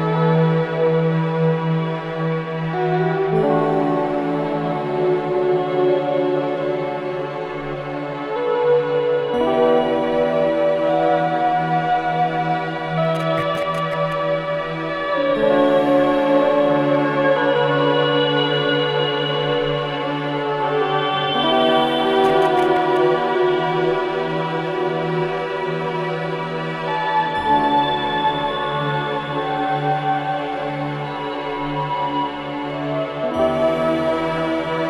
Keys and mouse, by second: 3.7 click, 5.5 click, 8.7 typing, 10.4 click, 11.3-19.3 drag, 19.5-29.3 drag, 30.6 typing, 31.9-32.6 typing, 33.4-34.4 drag, 34.6-34.8 drag.